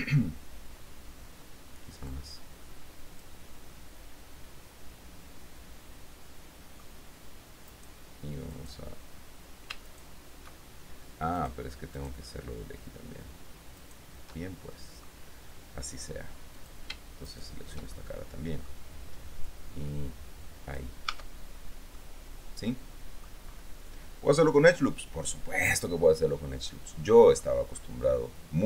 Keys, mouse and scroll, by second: 2.5-3.6 drag, 3.9-7.2 middle drag, 7.9 middle click, 8.7 right click, 10.0 alt+shift+right click, 11.6 shift+right click, 12.2 shift+right click, 14.5 shift+middle click, 16.7 click, 17.1-17.4 scroll, 17.4 shift+middle click, 18.1 shift+middle click, 19.8-21.1 drag, 21.3 Tab, 22.2-23.6 middle drag, 25.4-27.8 drag, 28.2 scroll down 2, 28.2-28.6 middle drag.